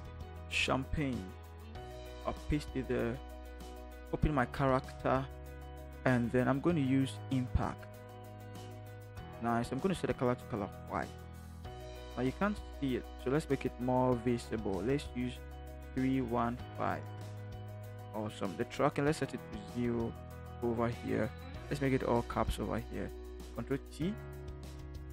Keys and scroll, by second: 1.3 ctrl+c, 2.3 ctrl+v, 15.9 3, 16.1 1, 16.5 5, 17.0 Return, 23.6 ctrl+t.